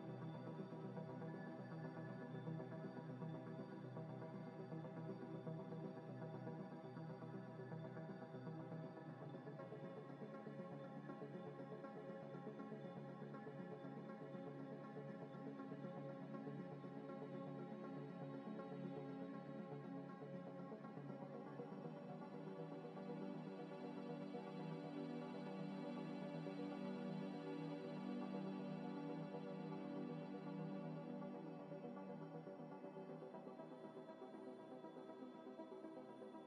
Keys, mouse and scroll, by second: 0.0 z, 0.4 middle click, 0.8 ctrl+z, 2.7 i, 5.0 1, 8.9 m, 10.4 shift+click, 11.5 m, 13.9 shift+click, 14.4 shift+click, 14.8 scroll up 1, 15.6 m, 17.0 double click, 20.8 z, 21.2 scroll down 1, 21.5 middle click, 21.8 z, 22.0 z, 22.4 middle click, 23.1 z, 24.9 3, 25.7 1, 25.8 ctrl+z, 26.2 e, 27.9 middle click, 28.3 2, 28.6 middle click, 29.2 1, 31.2 ctrl+shift+b, 32.4-33.2 scroll up 1, 33.7 double click, 33.8 `, 34.4 scroll up 1, 34.7-35.7 scroll down 1, 36.2 middle click.